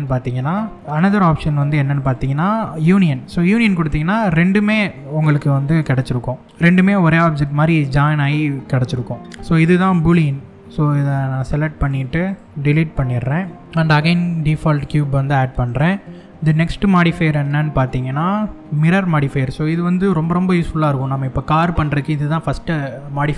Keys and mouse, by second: 2.5 click, 3.5 middle click, 5.3 click, 6.4-7.2 middle drag, 11.4 click, 11.9 shift+click, 12.5 x, 13.6 shift+a, 16.1-23.3 drag.